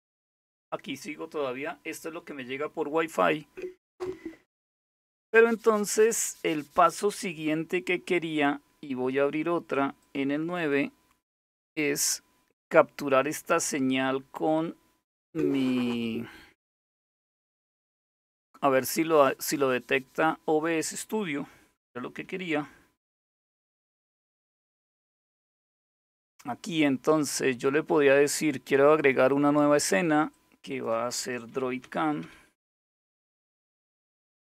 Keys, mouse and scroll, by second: 9.7 click, 10.3 click, 11.6 click, 23.8 super+), 28.6 click, 30.0 click, 31.1-33.3 typing, 34.2 Return.